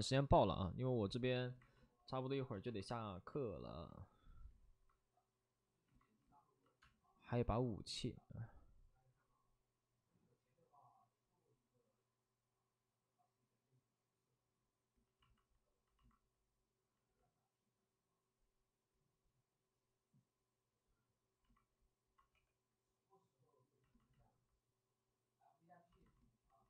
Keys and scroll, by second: 22.3 w.